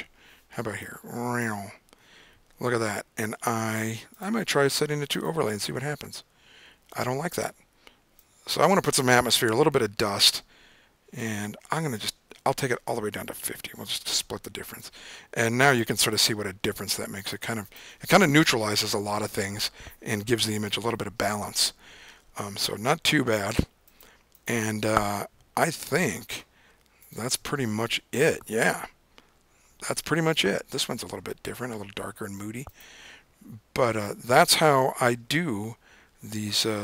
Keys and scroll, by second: 7.0 super+z, 9.9 super+z.